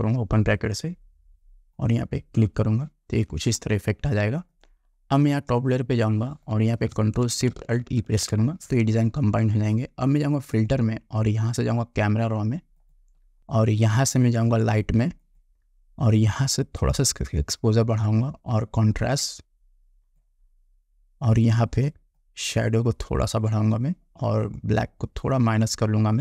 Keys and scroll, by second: 8.1 ctrl+alt+shift+e.